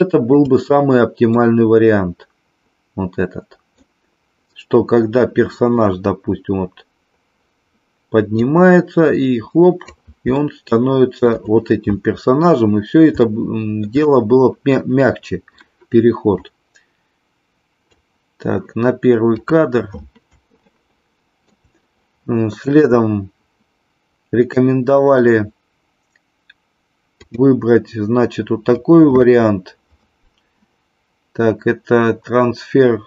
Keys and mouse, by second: 1.3-3.8 middle drag, 8.4-9.8 drag, 10.4 shift+middle click, 13.2-13.9 shift+middle drag, 16.5-18.0 drag, 20.6 shift+middle click, 27.1-33.0 drag.